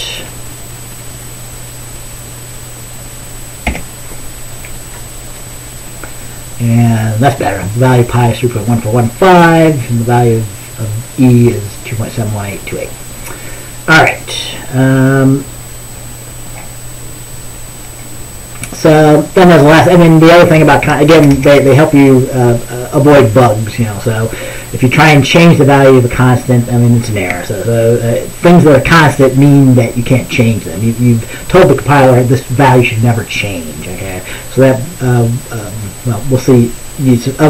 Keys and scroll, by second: 3.8 ctrl+b, 21.2 BackSpace, 21.4 BackSpace.